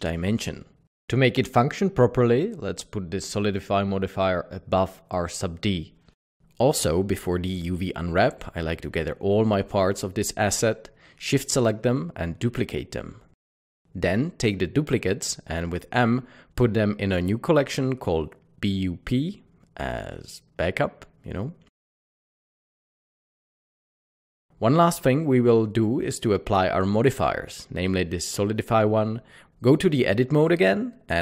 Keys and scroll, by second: 6.4 ctrl+z, 8.0 ctrl+z, 12.1 Escape, 13.4 s, 15.6-16.6 typing, 24.4 typing, 31.0 Tab.